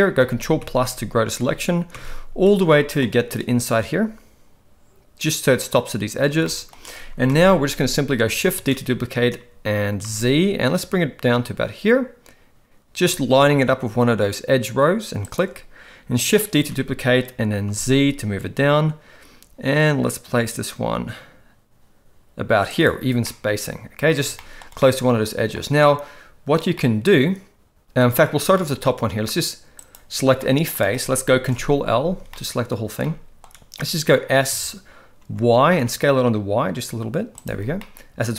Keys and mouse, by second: 0.2 ctrl+KP_Add, 0.4 ctrl+KP_Add, 0.6 ctrl+KP_Add, 0.9 ctrl+KP_Add, 1.4 ctrl+KP_Add, 1.9 ctrl+KP_Add, 2.7 middle click, 6.4 shift+middle click, 7.3 KP_1, 8.6 shift+d, 16.6 shift+d, 23.3 middle click, 24.4 shift+middle click, 24.8 middle click, 26.8-28.0 middle drag, 28.6 shift+middle click, 29.9 click, 30.4 middle click, 31.5 ctrl+l, 32.3 shift+middle click, 33.0 middle click, 34.5 s, 37.8-38.3 middle drag.